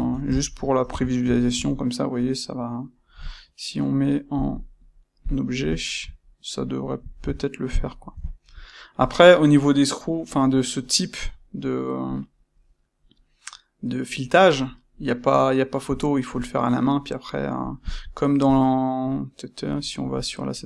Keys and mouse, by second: 0.8 a, 4.3-5.7 drag, 5.7-8.9 shift+middle drag, 8.9 click, 18.4 click, 19.6 click.